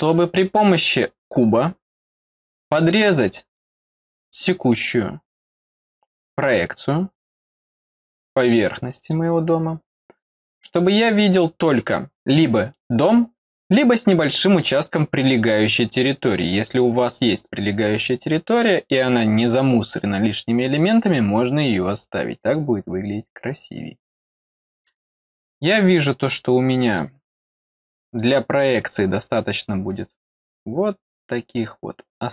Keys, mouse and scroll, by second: 2.6 click, 4.7-5.8 drag, 7.7-9.1 drag, 10.4 click, 11.8 middle click, 11.8 scroll up 2, 12.7 middle click, 14.9 click, 24.1 scroll up 1, 24.5 middle click, 26.2 click, 28.9 click, 31.6 click.